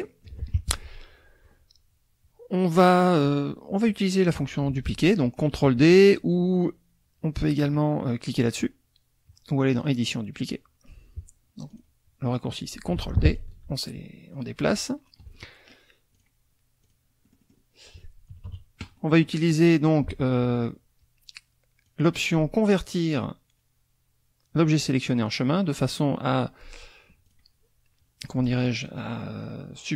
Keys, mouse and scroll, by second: 0.0 click, 9.8 click, 11.7 click, 12.9 ctrl+d, 13.4-15.3 ctrl+drag, 15.4 ctrl+click, 16.2 ctrl+click, 16.8 click, 17.2 click, 18.3 KP_Subtract, 21.9 click, 25.3 click, 27.3 click, 28.2 click, 28.8 click, 29.4-29.9 drag.